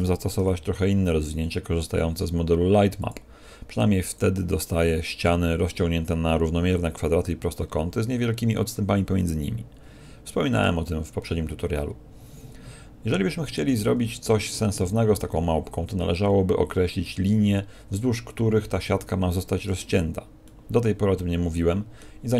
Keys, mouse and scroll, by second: 0.3 u, 7.4 scroll up 1, 8.1-9.8 scroll up 9, 10.4 scroll down 2, 11.2-12.8 scroll down 8, 13.6 Tab, 15.0 Tab, 20.4 middle click, 22.2 Tab.